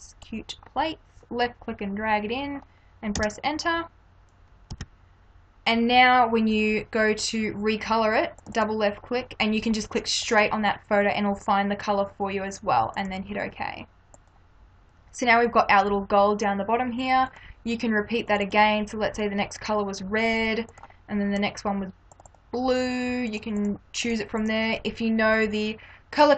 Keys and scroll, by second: 1.5 space, 5.1 Return.